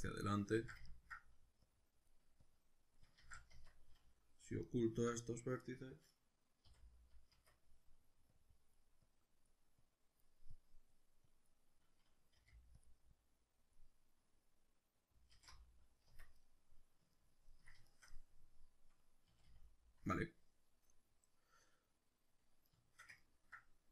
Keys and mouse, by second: 0.5 ctrl+z, 0.9 ctrl+middle click, 1.7-4.7 drag, 3.2 ctrl+z, 3.5 Tab, 4.7 alt+right click, 6.7 h, 7.3 Tab, 8.4-12.8 drag, 12.4 f, 13.2-16.4 drag, 15.4 alt+h, 16.1 Tab, 16.4-23.9 middle drag, 19.3 a.